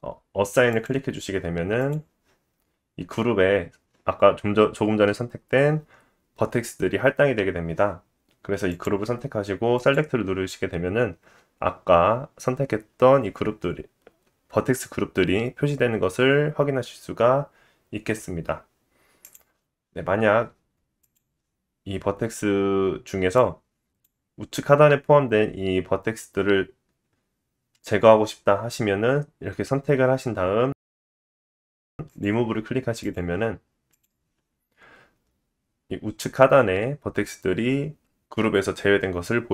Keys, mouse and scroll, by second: 0.7-8.7 drag, 8.8-9.8 drag, 19.3-21.0 drag, 23.4 click, 26.2 click, 32.1 click, 33.1-39.5 drag.